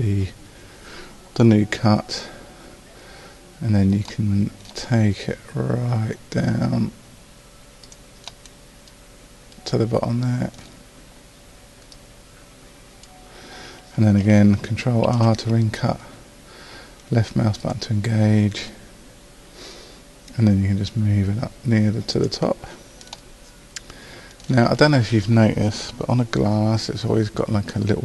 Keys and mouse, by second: 8.6-11.9 middle drag, 11.9 right click, 12.7-13.8 right drag, 15.1 ctrl+r, 23.2-26.1 right drag.